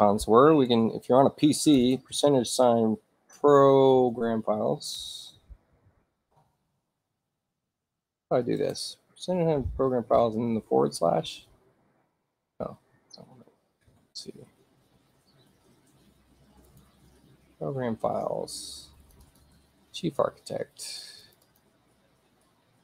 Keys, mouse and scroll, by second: 2.4 p, 3.8 BackSpace, 4.2 shift+p, 6.0-8.7 typing, 10.3 Return, 13.8 middle click, 13.8 scroll up 2, 15.0 middle click, 15.0-15.6 scroll down 4, 15.4 middle click, 16.1 middle click, 16.1 scroll down 2, 16.7 click, 17.7 middle click, 17.7-18.4 scroll up 2, 19.1 click, 19.3 click, 21.2 click, 21.5 click.